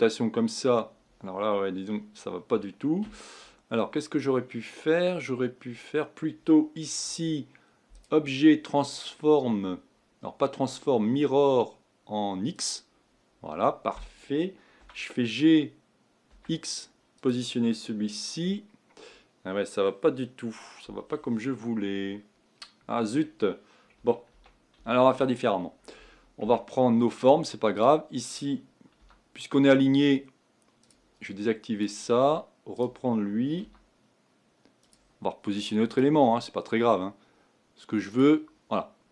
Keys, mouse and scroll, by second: 3.7-6.8 scroll down 2, 7.9-14.8 drag, 14.8 g, 24.3 ctrl+z, 24.8 ctrl+z, 26.4 Tab, 26.8-27.7 scroll up 2, 27.7-29.0 drag, 29.0 g, 31.8-33.5 drag, 33.6 g, 35.9 click, 36.1 g.